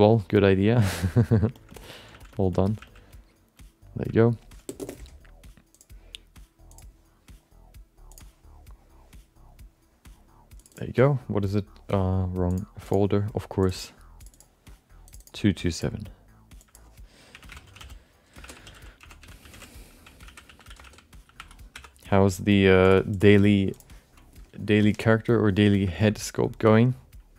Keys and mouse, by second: 0.9 middle click, 1.0 alt+middle click, 1.7 alt+middle click, 2.1 f, 2.3 alt+shift+middle click, 2.5 alt+middle click, 2.8 f, 3.1 click, 3.6 click, 4.2 alt+middle click, 5.7-6.9 drag, 26.1 alt+middle click.